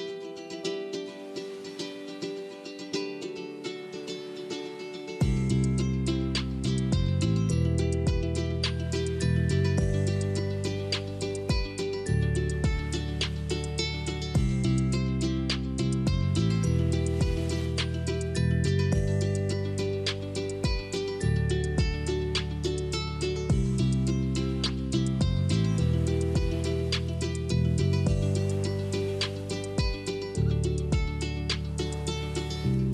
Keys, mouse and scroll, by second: 1.6 click, 3.3 click, 4.4 click, 5.5 middle click, 6.0 scroll down 3, 7.1 click, 8.3 click, 9.8-10.4 scroll up 5, 10.4 middle click, 11.3 scroll up 1, 11.8-13.2 shift+middle drag, 13.2 click, 14.9 middle click, 15.8-16.9 scroll down 3, 16.9 click, 18.6 click, 19.5 middle click, 20.0-21.2 scroll down 5, 21.2-22.2 shift+middle drag, 22.2-24.2 drag, 25.7 click, 27.3 click, 28.7 middle click, 29.3 scroll up 2, 30.2-32.0 middle drag, 32.0 click.